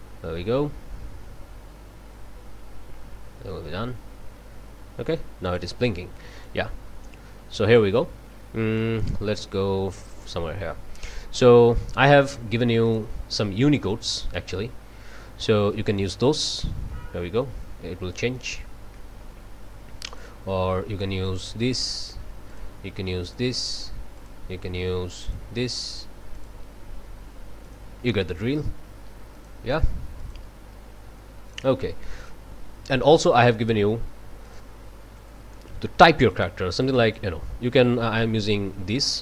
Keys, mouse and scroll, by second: 5.5 click, 6.4-8.0 drag, 8.7 click, 12.1 scroll down 1, 12.8 click, 13.2-15.9 scroll down 2, 15.9 click, 17.6 scroll up 1, 18.2-19.1 drag, 20.1 click, 21.3 click, 22.5 click, 23.2 click, 24.2 click, 25.2 click, 26.4 click, 27.6 click, 29.4 click, 30.2 click, 31.5 click, 32.2 click, 33.1 click, 34.4 click, 36.3 click, 36.8-37.4 drag, 38.4 click.